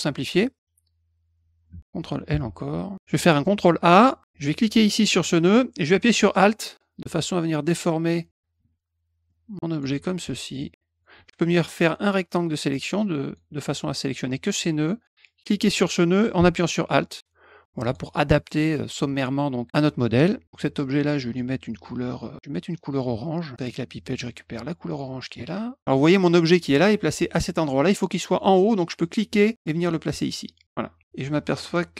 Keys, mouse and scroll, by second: 2.3 ctrl+l, 2.9 ctrl+l, 4.8-8.3 drag, 9.2 alt+click, 10.6 alt+click, 11.7-13.3 drag, 15.2-17.9 drag, 21.3-22.5 middle drag, 23.6 click, 24.9 click, 29.0-30.6 drag, 31.6 click.